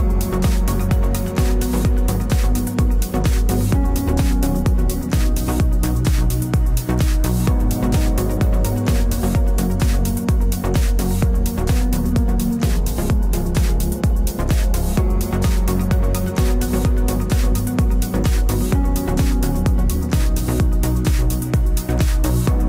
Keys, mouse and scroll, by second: 1.6 middle click, 3.2 ctrl+s, 4.4 middle click, 9.7-11.4 right drag, 11.2 a, 12.2 k.